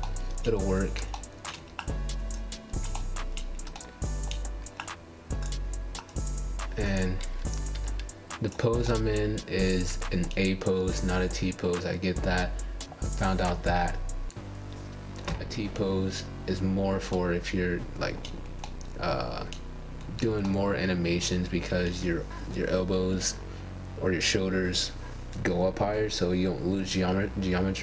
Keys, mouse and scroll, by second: 4.9 g, 5.8-8.6 middle drag, 11.7 r, 18.2-20.4 middle drag, 20.4 scroll down 1, 20.7-22.7 shift+middle drag, 22.7-23.1 scroll down 2, 23.1 middle click, 23.8 scroll down 3, 24.1-24.5 scroll up 4, 24.6-26.6 shift+middle drag, 26.7-27.0 scroll down 1, 27.1-27.8 middle drag.